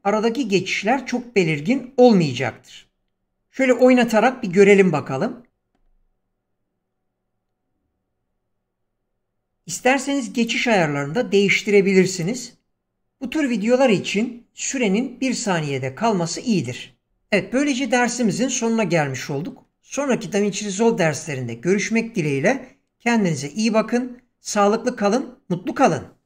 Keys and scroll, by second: 5.5 space.